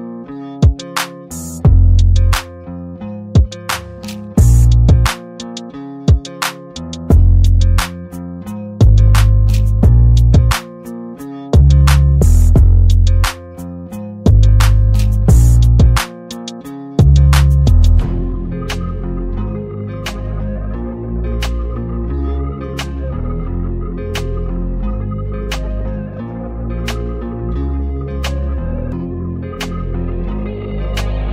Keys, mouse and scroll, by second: 1.9 click, 2.0 click, 4.4 Tab, 7.2 click, 7.8 Tab, 11.0 Tab, 13.1 Tab, 13.8-15.1 drag, 21.0 ctrl+g, 21.9-22.9 drag, 27.2-30.6 alt+drag, 31.0-31.3 drag.